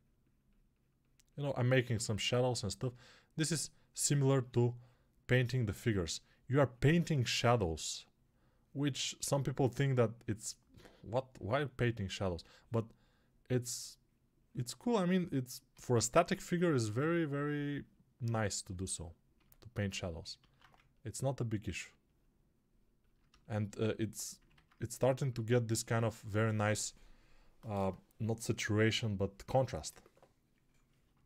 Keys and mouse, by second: 15.7-31.2 alt+drag.